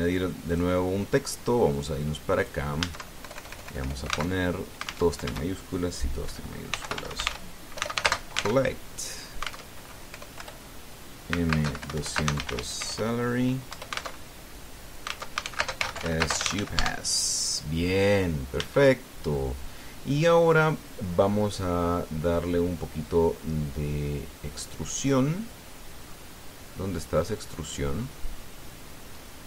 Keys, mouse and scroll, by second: 0.5 shift+a, 1.2 click, 2.5 click, 3.6 Tab, 4.0 BackSpace, 5.1 alt+Tab, 5.9 alt+Tab, 6.0 Caps_Lock, 7.5-8.8 typing, 9.4 alt+Tab, 10.4 alt+Tab, 11.2 Return, 12.1-13.7 typing, 14.5 Return, 15.0 alt+Tab, 16.1 alt+Tab, 16.2 alt+s, 16.4 alt+space, 16.6 alt+y, 16.8 alt+u, 17.0 alt+space, 17.1 alt+p, 17.2 alt+s, 17.6 alt+Caps_Lock, 19.3 Tab, 24.1-24.4 scroll down 2, 26.8-27.8 scroll down 4, 28.7-29.1 scroll up 2.